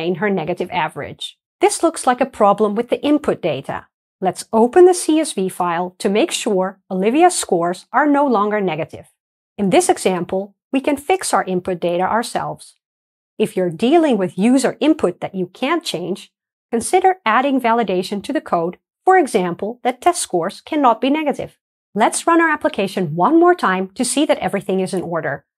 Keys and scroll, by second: 4.2 super+e, 9.7 ctrl+Down, 12.0 Delete, 12.4 Escape, 22.1 ctrl+r, 22.1 shift+F10.